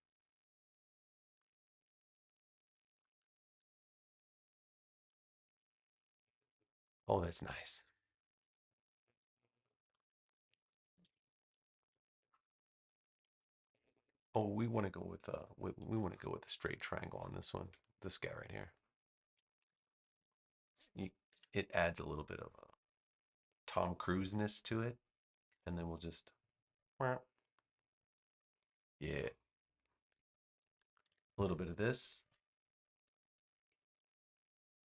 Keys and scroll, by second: 6.3 space, 9.0 v, 10.8 super+c, 11.1 super+v, 13.0 space, 15.3 BackSpace, 15.9 space, 19.6 super+c, 20.1 space, 21.3 super+v, 25.4 a, 28.3 space, 30.9 super+v, 32.2 v.